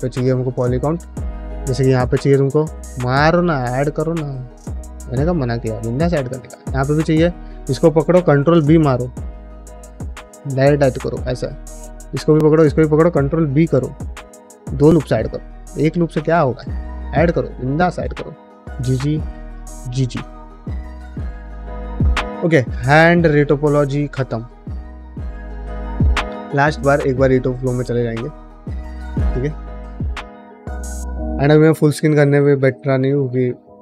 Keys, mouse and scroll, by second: 1.9 Tab, 2.1 middle click, 2.4 ctrl+r, 3.5 click, 4.2 alt+click, 4.8 g, 6.0 middle click, 7.0 alt+click, 8.1 ctrl+b, 9.6 middle click, 9.9 shift+middle click, 10.1 middle click, 11.6 alt+click, 12.3 alt+shift+click, 13.4 ctrl+b, 15.0 middle click, 15.8 alt+click, 16.1 g, 17.3 alt+click, 17.6 g, 18.6 alt+click, 19.2 g, 19.9 middle click, 20.4-22.0 middle drag, 22.5 middle click, 23.1 ctrl+middle click, 23.4 middle click, 23.8 shift+middle click, 24.0 middle click, 24.4 1, 24.4 click, 24.6 g, 25.1 ctrl+middle click, 25.4 middle click, 27.9-33.8 drag.